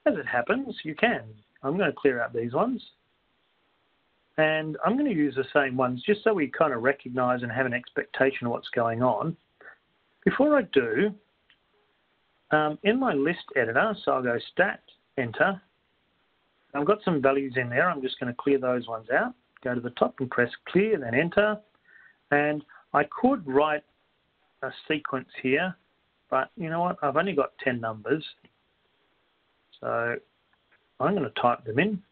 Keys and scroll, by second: 3.2 Down, 5.2 Down, 5.7 Down, 6.7 Down, 8.7 Up, 11.2 Up, 11.4 Down, 12.1 Down, 16.7 Return, 18.2 Up, 21.7 Return, 23.7 1, 24.0 Up, 24.0 Return, 25.2 2, 26.2 Return, 26.7 3, 27.2 Return, 28.2 4, 29.2 Return, 29.7 5, 31.2 6, 31.4 Return, 31.4 Up, 31.4 1.